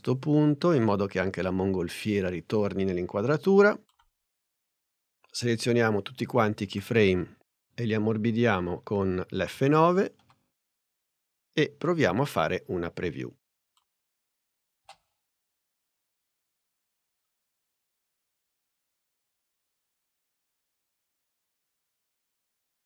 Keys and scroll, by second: 10.3 F9, 12.6 n, 14.8 space.